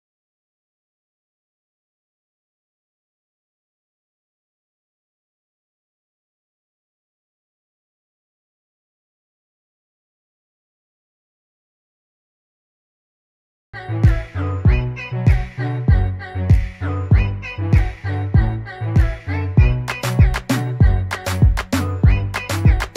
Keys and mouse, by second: 0.8 click, 15.1 click, 17.6 click.